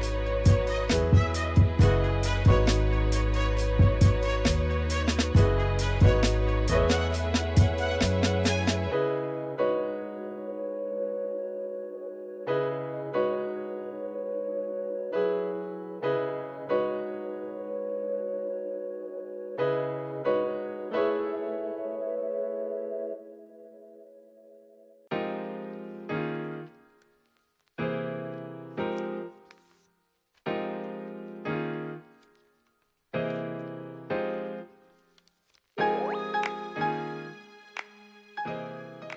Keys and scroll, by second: 0.8-12.0 typing, 14.5 space, 15.0 space, 16.1 s, 17.0 space, 17.8 space, 18.2 space, 19.4-29.0 typing, 30.2 space, 30.4 space, 31.6-35.3 typing, 36.8 space, 37.0 space, 38.2 space.